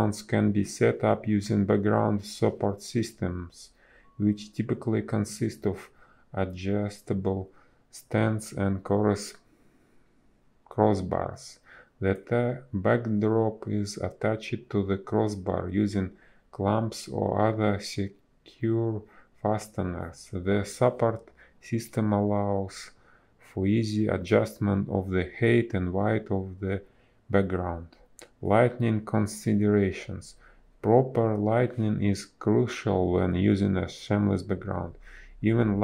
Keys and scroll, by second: 2.8 space, 5.3 ctrl+z, 5.4 space, 10.6 space, 10.9 ctrl+z, 12.8 ctrl+z, 16.7 ctrl+z, 21.9 ctrl+z, 26.2 ctrl+z, 26.5 space, 28.7 ctrl+z, 34.8 a.